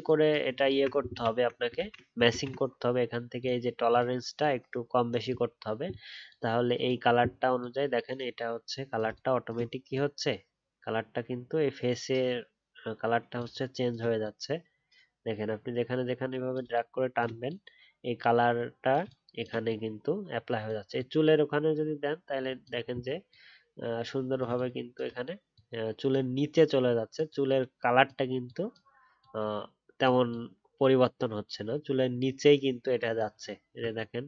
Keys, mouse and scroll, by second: 0.6-1.1 alt+scroll down 1, 1.1-1.7 alt+scroll, 1.7 ctrl+z, 2.3 ctrl+z, 33.3 alt+scroll down 1.